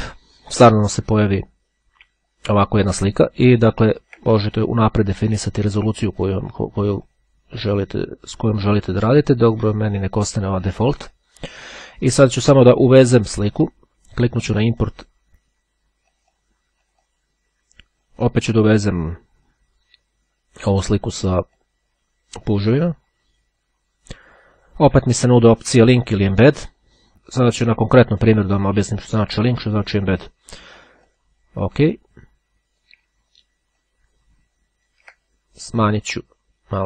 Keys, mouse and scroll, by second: 2.7-3.9 ctrl+scroll up 1, 3.9-4.5 ctrl+scroll up 1, 4.5 ctrl+scroll up 1, 7.3 click, 11.6 click, 12.3 click, 14.3-15.5 drag, 16.1-17.1 drag, 21.5 click, 22.7 click, 30.7-31.8 drag, 32.1-33.5 drag, 34.0-35.6 ctrl+drag, 35.9-36.8 drag.